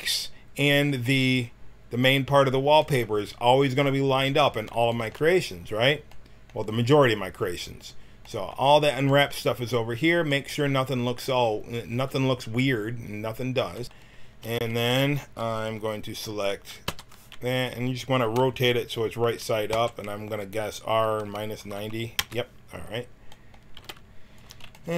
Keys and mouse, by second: 4.2-6.3 middle drag, 14.4 a, 14.7 a, 14.9 a, 16.8 l, 17.5-19.7 drag, 19.7 r, 23.7 g.